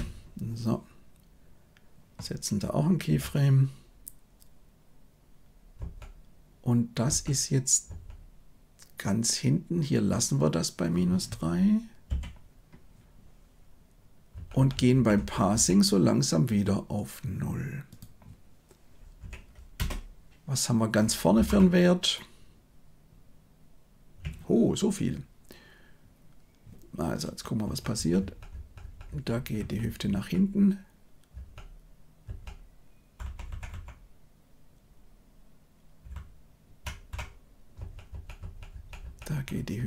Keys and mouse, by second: 5.7 Right, 7.0 Right, 7.8 Right, 14.3 Right, 14.5 Right, 14.7 Right, 14.9 Right, 15.1 Right, 15.5 Right, 17.8-19.7 drag, 21.4 shift+Left, 27.6 Right, 27.9 Right, 28.2 Right, 28.5 Right, 28.8 Right, 29.0 Right, 29.3 Right, 29.5 Right, 29.8 Right, 30.0 Right, 31.3 Right, 32.2 Right, 33.2 Left, 33.4 Left, 33.6 Left, 36.0-36.7 Left, 37.7 Right, 38.0 Right, 38.3 Right, 38.7 Right, 39.0 Right, 39.2 Right, 39.5 Right.